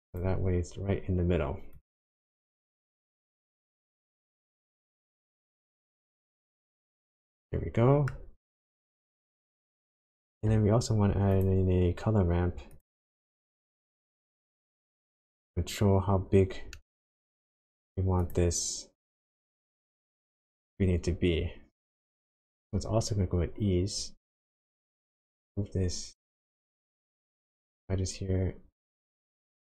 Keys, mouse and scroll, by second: 0.1 click, 1.7 click, 2.1 click, 2.7 click, 3.2 click, 3.8 click, 5.2 click, 5.6-7.1 scroll down 6, 7.1 middle click, 7.1 scroll down 1, 8.5 click, 9.9 shift+a, 15.6-16.3 scroll up 5, 16.8 middle click, 17.4-18.1 scroll up 1, 18.2 click, 24.4 click, 27.6 click.